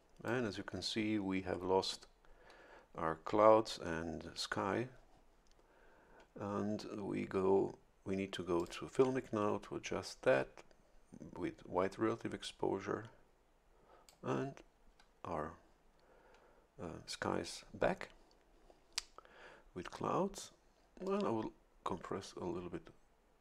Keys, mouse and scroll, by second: 0.0 click, 8.6 click, 12.4-14.5 drag, 21.0-23.4 drag.